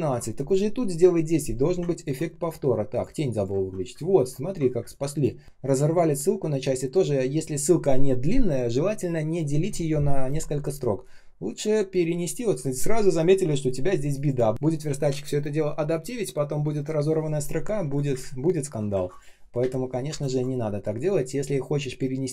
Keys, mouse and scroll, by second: 1.9 ctrl+click, 3.5 ctrl+scroll down 1, 3.8 space, 4.3 ctrl+scroll up 1, 4.7 space, 5.2 space, 5.2 space, 18.0 Delete, 19.5 Delete, 20.0 space.